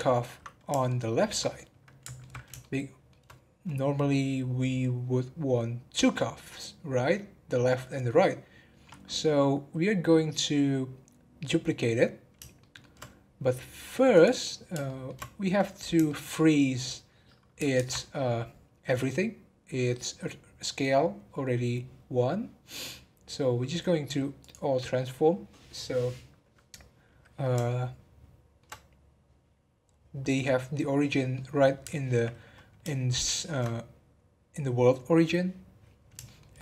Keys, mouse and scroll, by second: 0.8-5.7 middle drag, 12.6 shift+middle click, 13.1 scroll down 2, 13.9 scroll down 2, 14.1 click, 14.8-15.4 shift+middle drag, 15.4-16.0 scroll up 1, 16.0 shift+middle drag, 16.3 scroll up 1, 17.7 ctrl+a, 25.2 scroll down 1, 27.6-29.3 shift+middle drag, 29.3-29.9 scroll up 1, 30.4-36.0 middle drag, 36.2-36.6 shift+middle drag.